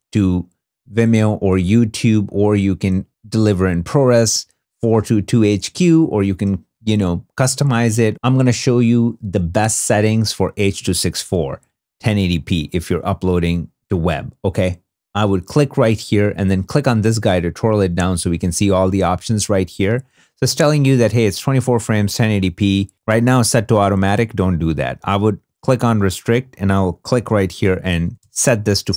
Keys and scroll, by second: 27.0-28.0 typing.